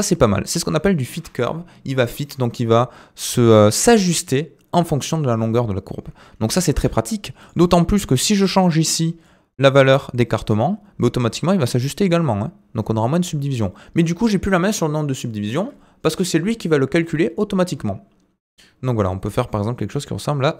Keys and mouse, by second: 0.0 r, 1.1 Tab, 6.5 shift+middle drag, 7.4 click, 9.3-13.6 drag, 17.4-20.5 drag.